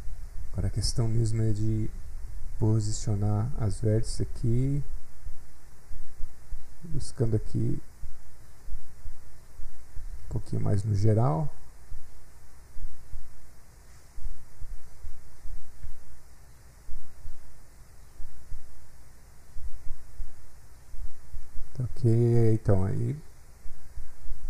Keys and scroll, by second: 0.1 s.